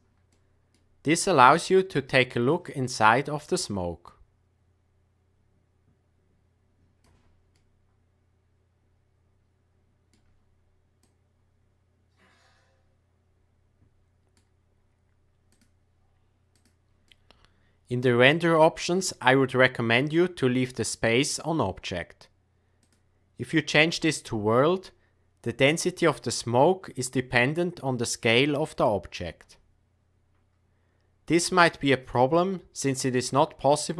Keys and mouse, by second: 0.3-0.7 middle drag, 2.7 click, 7.5-10.1 middle drag, 11.1-14.3 drag, 15.5-16.6 drag, 17.0-18.3 middle drag, 22.8-24.1 drag, 29.4 s.